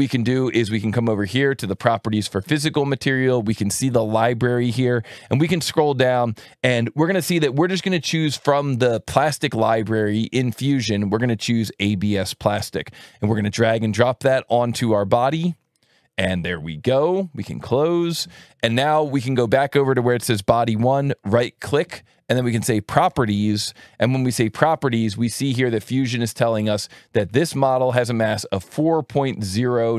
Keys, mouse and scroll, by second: 9.0 click, 11.8-15.2 drag, 17.7 click, 20.7 right click, 23.7 click, 27.3 alt+1, 27.8 alt+click, 28.8 click.